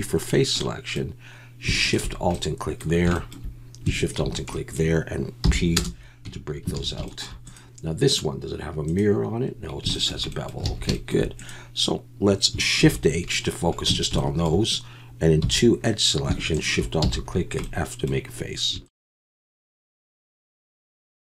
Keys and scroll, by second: 5.4 p, 6.2 Tab, 6.7 alt+a, 10.7 alt+a, 12.8 shift+h, 13.9 Tab, 15.4 2, 17.0 f, 18.4 Tab, 19.2 f, 19.8 f, 20.2 f, 20.4 alt+a, 20.4 Tab, 20.8 alt+h, 20.9 alt+a.